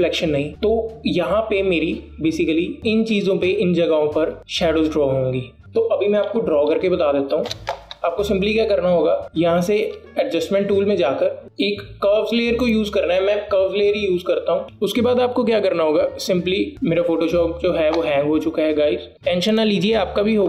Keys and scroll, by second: 8.6 BackSpace, 11.1 BackSpace.